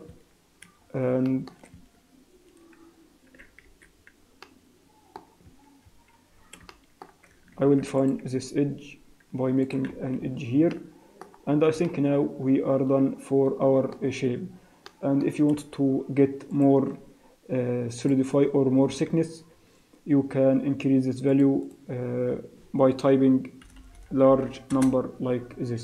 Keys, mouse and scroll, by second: 0.2 Tab, 0.8 scroll up 3, 1.3 shift+middle click, 1.5 shift+scroll up 2, 1.8 Tab, 2.4-2.8 scroll down 2, 2.8 z, 4.5 middle click, 5.5 Tab, 5.7 scroll down 1, 6.0 Tab, 6.7 shift+middle click, 7.5 ctrl+r, 10.0 Tab, 10.3-10.7 scroll down 4, 10.7 middle click, 11.5-12.0 scroll down 2, 11.8 middle click, 14.1-14.4 scroll up 5, 14.8 middle click, 16.5 click, 19.4 click, 21.3 click, 23.8 BackSpace, 24.0 BackSpace.